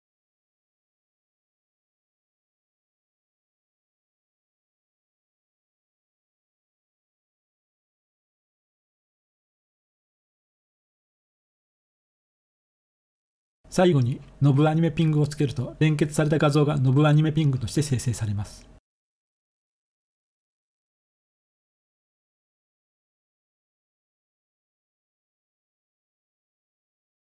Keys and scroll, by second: 0.0-1.1 typing, 6.6 ctrl+c, 8.6 ctrl+v, 10.7-13.9 typing, 15.5 Return.